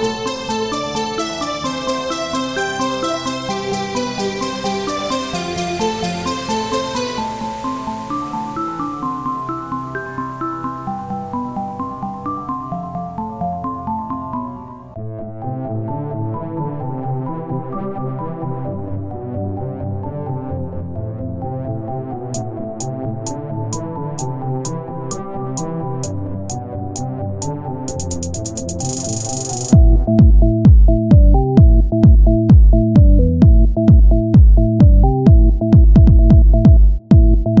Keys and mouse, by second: 0.3 z, 1.4 ctrl+Tab, 2.1 ctrl+Tab, 2.5 ctrl+Tab, 3.1 click, 3.3 z, 4.8 z, 5.8 i, 6.8 w, 7.5 Tab, 8.7 ctrl+a, 9.8 KP_1, 10.2 Tab, 10.5 z, 11.3 ctrl+Tab, 11.9 click, 12.3 z, 12.7 z, 13.3 c, 14.9-18.7 drag, 15.6 r, 19.0 c, 19.7 click, 19.7 right click, 20.8-22.1 drag, 21.2 s, 22.1 r, 23.6 click, 24.6 s, 25.6 r, 26.8 s, 28.4-31.8 drag, 29.7 e, 32.6 r, 34.3 s, 36.5 click.